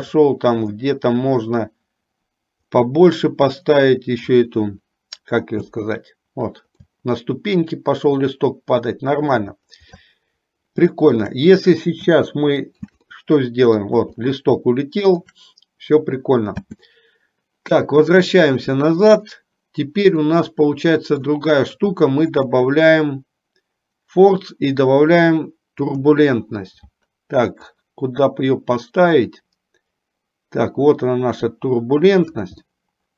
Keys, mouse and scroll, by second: 1.0 middle click, 3.1-4.6 middle drag, 6.0 space, 7.1-9.6 shift+middle drag, 10.2-11.7 shift+middle drag, 12.3 space, 12.5 middle click, 13.1 space, 13.3 middle click, 14.5 shift+middle click, 17.0 space, 19.3 click, 20.6-21.6 middle drag, 22.7-26.3 drag, 27.7-32.8 drag, 33.0-33.1 middle drag.